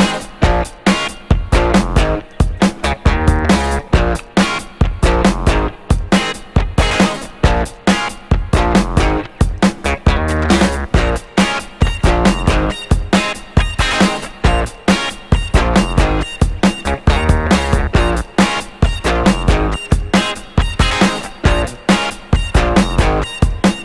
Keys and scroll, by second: 1.1 Escape, 1.6 Escape, 2.1 Escape, 20.9 Delete, 21.9 Delete, 22.7 Delete, 23.1 Delete.